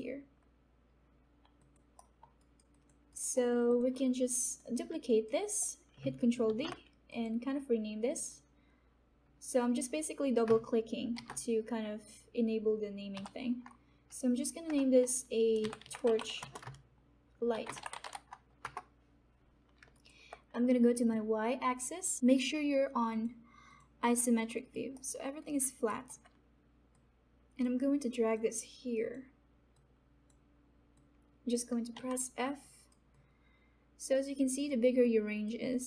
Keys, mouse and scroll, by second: 1.4 alt+click, 2.3 alt+middle click, 2.4 alt+right click, 2.7 alt+click, 3.1 alt+right click, 3.3 alt+middle click, 3.6 alt+click, 4.4 click, 5.0 alt+right click, 5.5 alt+right click, 6.4 ctrl+d, 7.1 click, 10.9 click, 11.1 shift+t, 13.1 o, 14.6-18.5 typing, 18.6 Return, 19.9 alt+right click, 21.0 click, 21.7 alt+right click, 23.0 click, 24.5 alt+right click, 24.9 alt+middle click, 25.3 alt+right click, 25.8 alt+middle click, 26.9-31.9 drag, 31.9 f, 32.6 alt+right click, 33.0-35.0 alt+drag, 35.0 alt+right click, 35.7 alt+click.